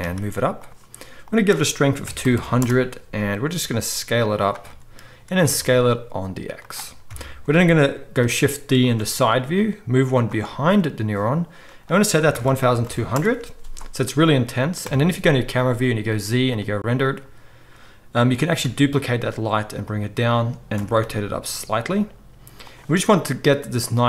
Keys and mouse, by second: 1.3-4.5 drag, 2.3 0, 3.5 s, 4.5-11.7 middle drag, 5.4 s, 7.0 KP_3, 8.1 shift+d, 8.9 r, 11.7-19.9 drag, 12.8 0, 14.8 KP_0, 16.0 z, 18.6 shift+d, 19.9-23.7 middle drag, 20.7 r.